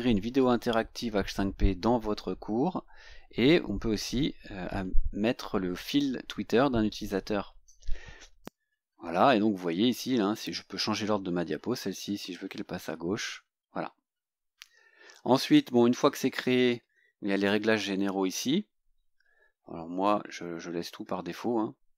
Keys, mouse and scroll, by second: 8.4 click, 9.3 scroll down 2, 12.4 click, 14.4-14.7 scroll up 1, 15.3-16.0 scroll down 4, 16.4 scroll down 2, 17.4 click, 18.4 scroll down 2, 19.3 scroll down 2.